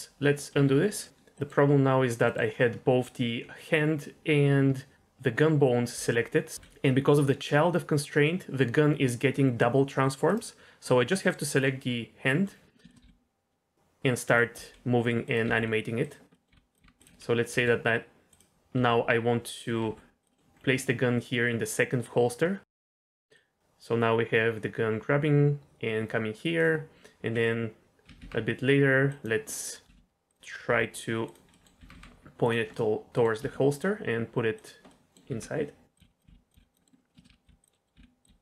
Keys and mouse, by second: 0.5 ctrl+z, 1.3 middle click, 2.2 middle click, 5.9 g, 12.2 middle click, 12.9 shift+middle click, 13.0 g, 14.5 r, 15.2 click, 15.4 g, 16.3 click, 16.5 r, 16.8 r, 17.5 g, 18.7 r, 19.8 g, 23.4-26.5 drag, 28.0 r, 28.1 r, 29.4-29.8 middle drag, 29.8 r, 29.9 r, 30.2 click, 30.6 r, 31.7 r, 31.9 r, 32.4 click, 32.7-33.2 middle drag, 33.3 g, 34.5 click, 34.9 middle drag, 35.2-38.4 typing, 36.8 drag, 37.1 click, 37.2 shift+click, 37.7 middle drag.